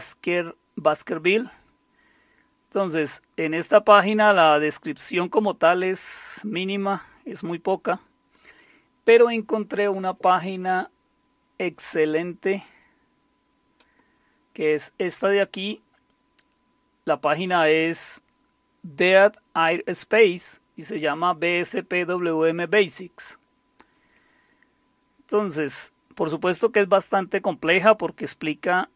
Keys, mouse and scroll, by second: 1.6 scroll down 2, 2.2-4.0 scroll down 4, 4.6-8.4 scroll down 8, 8.4 scroll down 1, 13.8-23.0 middle drag, 23.0-28.8 scroll down 7, 28.8-28.9 scroll down 3.